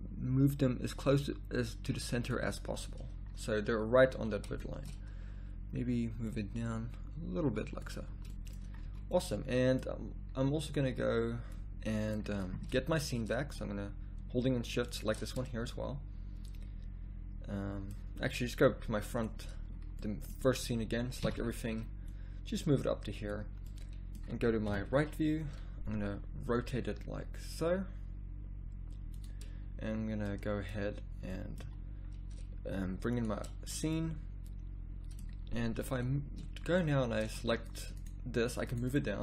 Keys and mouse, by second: 0.6-2.3 middle drag, 2.4 middle click, 8.0 z, 8.8 a, 14.9-17.6 drag, 21.2 a, 24.7 KP_3, 26.6 r, 31.6 a, 35.7 b.